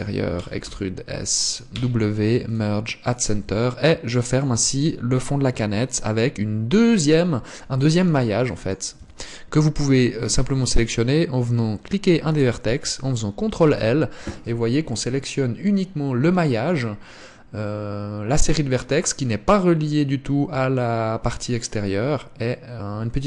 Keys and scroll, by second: 0.9 e, 2.2 w, 3.8 Tab, 9.4 Tab, 14.0 ctrl+l.